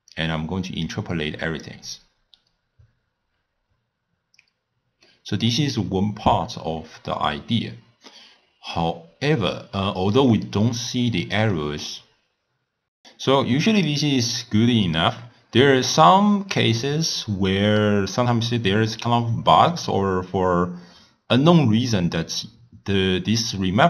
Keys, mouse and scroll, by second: 0.2-4.3 drag, 5.2-10.3 middle drag, 10.3 d, 10.5 right click, 11.5 d, 15.2 scroll down 1, 15.2-16.0 scroll up 7, 16.8-21.3 middle drag.